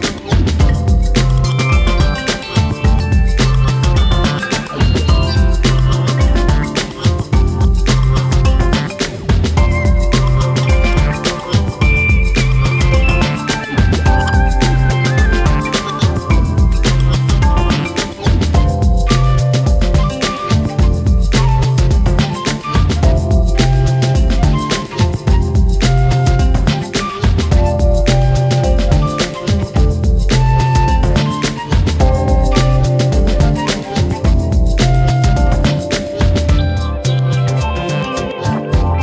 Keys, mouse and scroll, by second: 0.1 click, 1.1 shift+click, 2.1-5.4 shift+drag, 6.3-7.5 drag, 10.8-11.9 drag, 12.1-12.9 drag, 12.9 scroll down 1, 13.1 Tab, 13.4 click, 13.7-14.2 scroll down 2, 13.8-14.1 middle drag, 14.2-14.6 shift+middle drag, 14.6 scroll up 1, 14.6-15.3 shift+middle drag, 15.3-15.7 scroll up 2, 15.4 shift+middle click, 15.7 shift+middle click, 15.9 click, 16.1 Tab, 16.3-17.4 scroll up 1, 17.4-18.3 drag, 18.3-19.0 scroll down 2, 19.1 click, 20.1 click, 20.3-20.6 scroll down 2, 20.6-21.1 scroll up 1, 21.2 click, 21.3 click, 21.6 scroll up 1, 21.8-23.5 shift+middle drag, 23.6 shift+click, 23.7 scroll down 2, 23.9 shift+middle click, 24.2 scroll up 4, 24.4 shift+middle click, 25.5 click, 25.9 scroll down 7, 26.2 shift+middle click, 26.4 Tab, 26.7 click, 26.8 scroll down 1, 26.9-28.1 shift+middle drag, 28.1-28.5 scroll up 3, 28.2 shift+middle click, 28.5 shift+middle click, 28.7 click, 29.0 Tab, 29.2-29.8 scroll up 3, 29.4 shift+middle click, 30.3 shift+middle click, 31.2-31.9 drag, 32.1-33.5 drag, 34.1-35.2 drag, 36.1 click, 36.4 scroll down 1, 36.6 shift+middle click, 36.8-37.4 scroll up 1, 37.5 shift+click, 38.1-39.0 shift+middle drag.